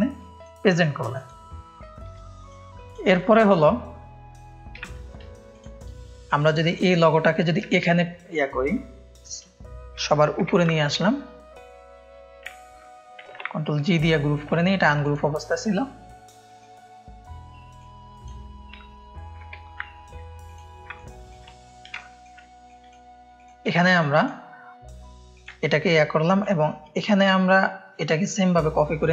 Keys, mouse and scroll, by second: 0.2 click, 0.7-2.4 drag, 2.3 ctrl+space, 2.8 click, 3.1 ctrl+click, 4.8 space, 5.5 click, 6.2-6.7 drag, 7.5-8.5 drag, 13.2 ctrl+g, 13.7 click, 14.1 ctrl+space, 15.0-18.2 drag, 20.4 click, 20.9 ctrl+space, 20.9 ctrl+click, 21.9 ctrl+click, 22.0 ctrl+space, 22.6 click, 23.3 click, 23.7 space, 24.1 click, 25.3 click, 26.4-28.2 alt+drag.